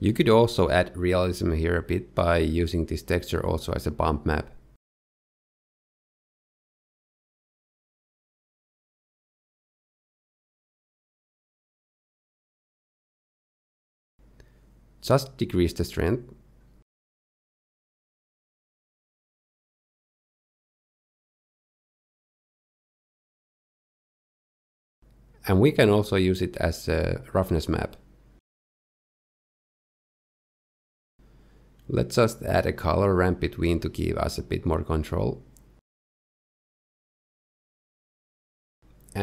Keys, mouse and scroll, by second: 1.0-1.7 scroll up 4, 1.7 shift+middle click, 2.7 click, 4.0 click, 4.3 g, 5.3 click, 10.6 click, 12.4 scroll down 1, 12.8 middle click, 14.4-15.2 scroll up 2, 15.2 click, 15.2-17.6 scroll up 1, 20.0-21.1 scroll down 1, 21.1 middle click, 21.1-22.3 scroll down 1, 24.9 scroll down 2, 25.3 shift+middle click, 25.8-27.7 scroll down 2, 27.7 click, 32.5 shift+a, 34.0 r, 36.4 click, 38.4 ctrl+shift+click.